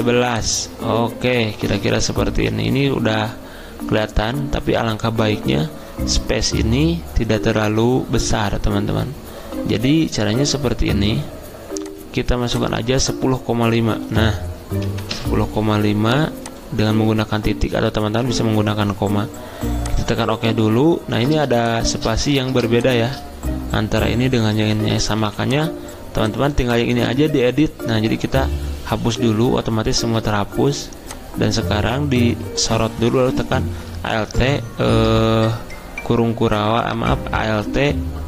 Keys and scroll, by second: 14.0-15.1 typing, 25.2 t, 28.5 BackSpace, 34.1 alt+Right, 35.3 alt+Right.